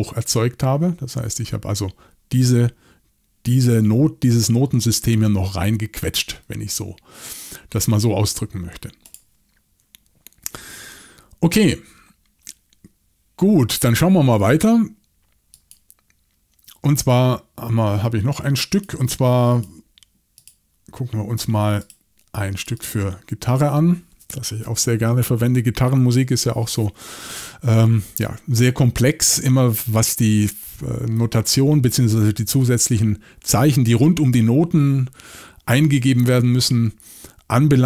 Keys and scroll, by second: 30.7-31.2 typing.